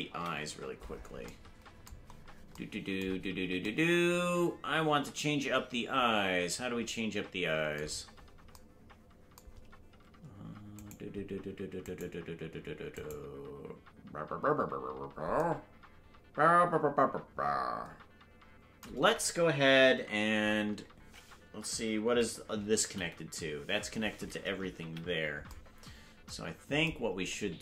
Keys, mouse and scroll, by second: 0.1 KP_Decimal, 2.1-3.2 scroll up 3, 3.2-3.7 scroll down 2, 8.1-8.5 scroll down 2, 11.8 right click, 13.3 right click, 24.8 ctrl+l, 24.8 KP_Decimal.